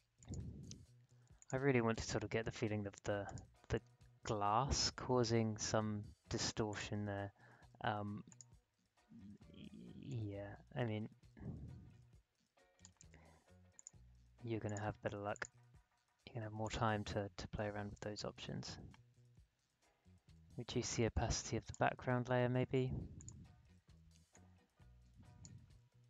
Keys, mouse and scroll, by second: 4.6-5.2 alt+scroll down 1, 5.2-5.8 alt+scroll up 1, 6.7-25.9 drag, 25.9-26.0 alt+scroll down 1.